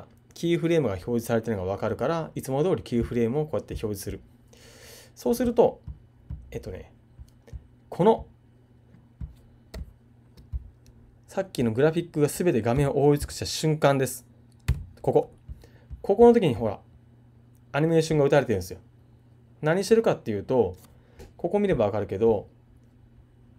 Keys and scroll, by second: 12.7 super+Left.